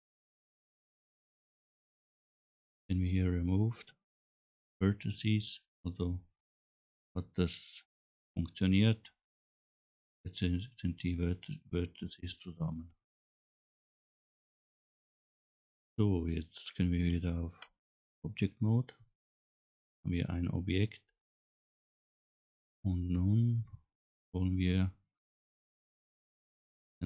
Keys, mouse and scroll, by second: 5.9 scroll up 2, 12.7-13.1 scroll down 3, 13.8 middle click, 17.7 Tab, 18.5-18.9 scroll down 2, 19.3 middle click, 23.6-24.6 middle drag.